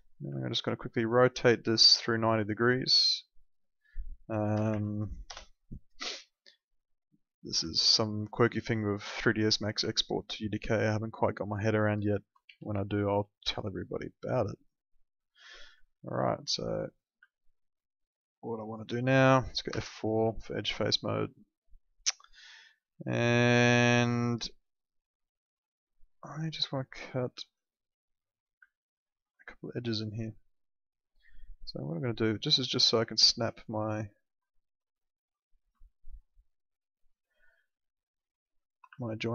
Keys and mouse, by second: 0.6 e, 1.2 click, 4.3-5.2 typing, 5.2 Return, 7.7 alt+middle click, 9.1 click, 9.9 alt+middle click, 12.4 w, 12.9 alt+middle click, 15.8 middle click, 16.2 alt+middle click, 16.8 click, 17.3 alt+middle click, 19.7 F4, 20.3 alt+middle click, 27.7 middle click, 28.6 alt+middle click, 31.6 click, 34.4 alt+middle click, 35.8 alt+middle click, 37.0 click, 38.6 ctrl+click, 39.0 alt+middle click.